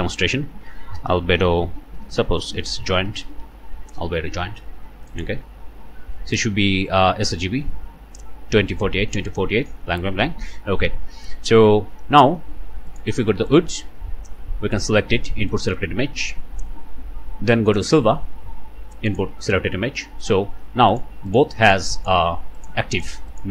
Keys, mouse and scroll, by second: 0.5-3.5 typing, 5.1 click, 5.7-6.0 scroll down 1, 6.0 click, 6.3 scroll down 1, 6.5 click, 9.5 scroll down 1, 10.8 scroll up 2, 12.9 click, 13.9 scroll down 1, 15.5 click, 17.7 click, 19.1 click, 20.9 click, 21.3 click, 21.7 click, 22.0 click, 22.6 click, 23.0 click, 23.3 click.